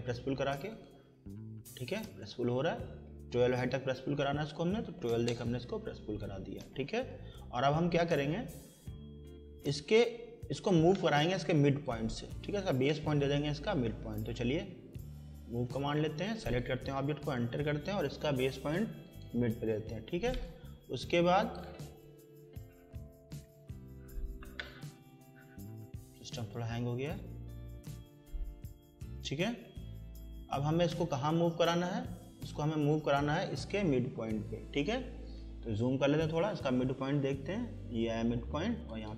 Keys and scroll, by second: 4.5-5.5 typing, 6.9 Escape, 17.2 Return, 27.6 Escape.